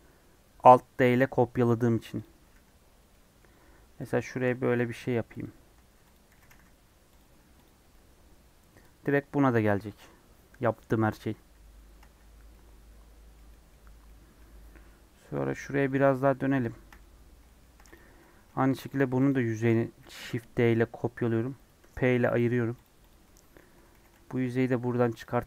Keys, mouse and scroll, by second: 2.1 click, 2.4 3, 2.8 scroll down 1, 3.0 middle click, 3.5 scroll up 3, 4.0 click, 4.1 shift+middle click, 4.6 e, 5.8 2, 6.0 click, 6.3 g, 7.3 Tab, 7.6 click, 7.7 scroll down 1, 7.8-12.3 middle drag, 12.3 scroll down 3, 12.4-13.8 middle drag, 13.8 scroll down 1, 14.0-15.9 middle drag, 15.9 scroll up 1, 16.2 middle click, 17.1 scroll up 1, 17.4 shift+middle click, 17.9 click, 18.0 Tab, 18.3 3, 18.4 middle click, 18.8 click, 19.9 shift+d, 22.3 p, 22.5 Tab, 22.8 click, 23.0 click, 23.1 middle click, 23.9 g, 25.3 middle click.